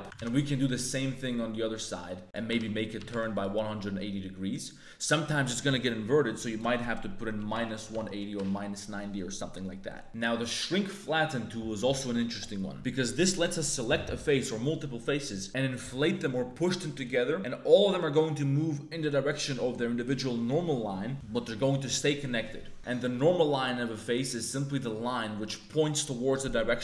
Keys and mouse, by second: 0.1 alt+e, 3.0 click, 6.5-8.2 drag, 9.8 middle click, 10.0 a, 23.6 middle click, 24.5 middle click, 25.4 middle click.